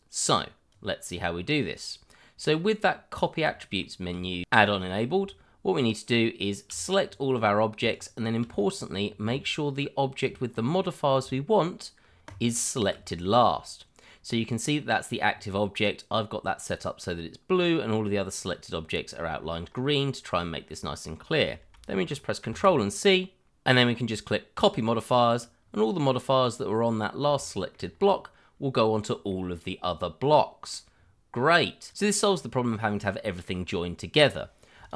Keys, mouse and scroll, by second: 0.7 click, 3.5 shift+middle click, 3.6 middle click, 3.7 shift+middle click, 4.7-5.2 scroll up 1, 7.0-7.7 scroll down 1, 7.9 shift+click, 7.9 click, 8.5-9.0 scroll up 1, 10.4-10.8 scroll up 1, 10.8 middle click, 12.2 shift+click, 12.4 click, 17.5 scroll down 1, 18.9 shift+middle click, 19.0 middle click, 19.1 shift+middle click, 19.3 scroll up 1, 22.4 ctrl+c, 24.8 click, 25.6-27.3 scroll down 1, 27.4 shift+middle click, 27.5 middle click, 27.6 shift+middle click, 27.9-28.3 scroll up 1, 29.3 middle click, 30.9-31.5 scroll down 1, 31.9 click, 32.3 shift+middle click, 32.4 middle click, 32.4 shift+middle click, 32.7 middle click, 32.8 shift+middle click, 33.0 middle click, 33.1 shift+middle click, 34.8 click.